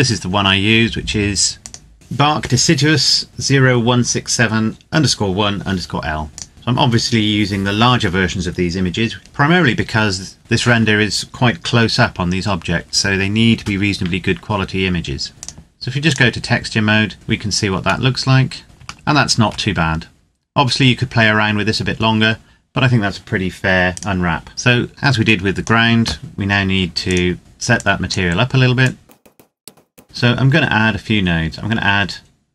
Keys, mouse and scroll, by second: 1.6 click, 6.3 click, 15.3 click, 17.8 middle click, 18.6 scroll up 1, 18.8 shift+middle click, 19.5-21.4 scroll up 1, 23.9 right click, 24.5 click, 27.4-27.7 scroll up 1, 27.7 click, 29.3 click, 29.7 shift+middle click, 29.9 click.